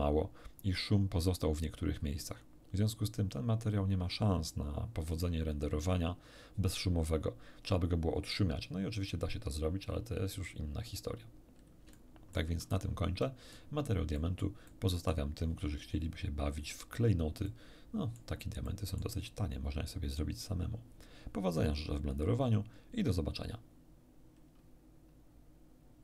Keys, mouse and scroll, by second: 10.7-11.4 scroll down 2, 11.9 shift+middle click, 12.8 shift+scroll down 1, 13.2 middle click, 14.2 middle click, 14.7 middle click, 17.4 middle click, 18.6 middle click.